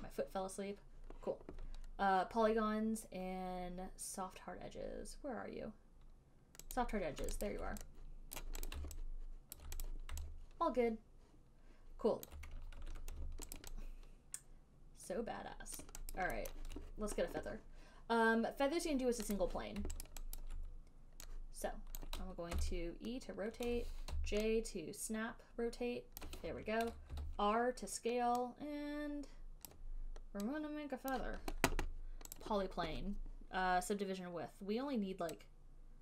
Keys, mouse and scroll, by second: 7.0 click, 7.8 alt+right click, 8.7 click, 8.9 right click, 9.9 alt+right click, 10.1 click, 12.5 alt+right click, 13.0 ctrl+1, 13.8 alt+click, 16.0 alt+click, 16.0 alt+right click, 16.4 alt+click, 16.4 alt+right click, 16.9 alt+right click, 16.9 alt+middle click, 19.6 click, 20.3 alt+right click, 20.6 alt+click, 22.3 click, 22.8 e, 24.4-26.4 j, 26.5 click, 26.5 j, 30.0 click, 30.0 j, 31.4 click, 32.7 click.